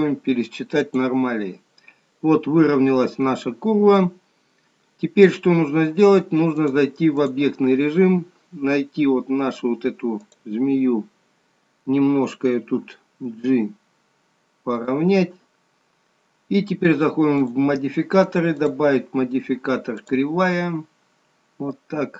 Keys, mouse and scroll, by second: 6.6 click, 8.1-9.7 scroll up 1, 9.7-10.2 scroll up 1, 10.4 click, 17.6 click, 18.7 click.